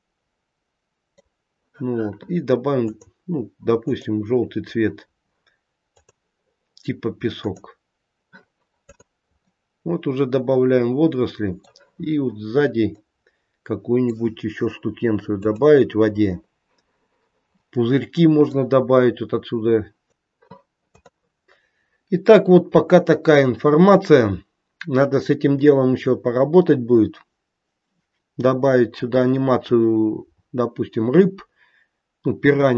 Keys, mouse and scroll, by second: 2.8 click, 3.8 click, 5.9 click, 8.8 click, 9.4 middle click, 12.9 middle click, 14.7-15.3 scroll down 1, 15.3 click, 15.3 scroll down 1, 17.6 middle click, 18.8-19.8 scroll up 2, 19.8 scroll up 3.